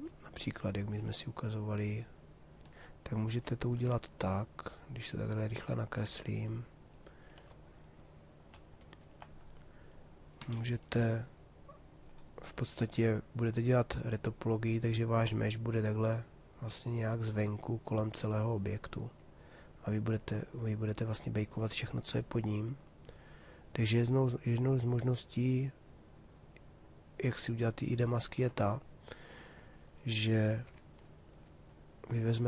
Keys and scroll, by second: 8.4 ctrl+shift+d, 30.3 Escape.